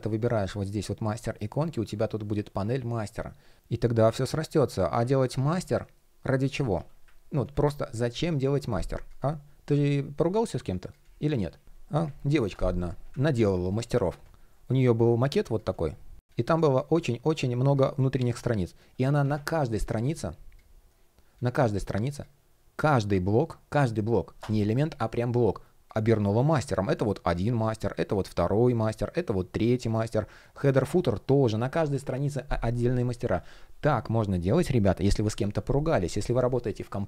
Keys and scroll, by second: 4.9 super+z, 14.1 shift+o, 14.7 shift+g.